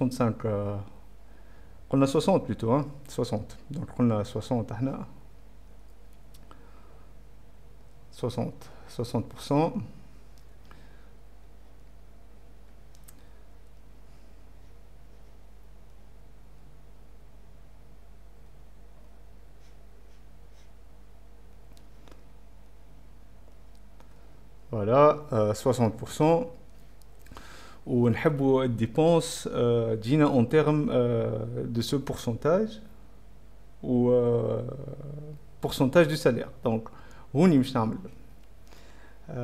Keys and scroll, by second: 5.7 BackSpace, 7.8-10.4 typing, 13.8-16.6 typing, 18.5-23.8 typing, 24.9 Return, 25.2 z, 37.7-39.3 typing.